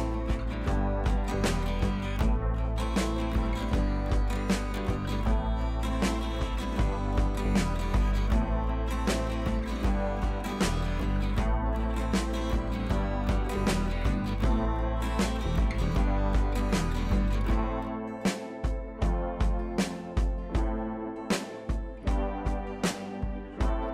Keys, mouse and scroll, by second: 0.3 click, 0.4 scroll down 1, 1.0 scroll up 1, 1.1 click, 1.8 right click, 2.1 click, 6.2 click, 15.3 click, 16.5 click, 21.7 click.